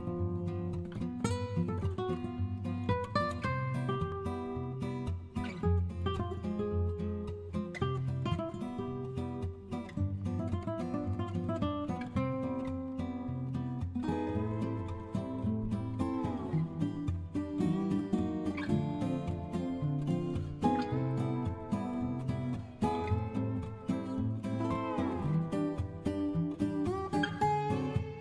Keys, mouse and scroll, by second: 2.0-3.4 typing, 3.0 Tab, 6.6 Return, 6.7-7.1 typing, 9.0-10.9 typing, 12.2-13.5 typing, 15.8-19.9 typing, 20.2 Return, 21.6-28.2 typing.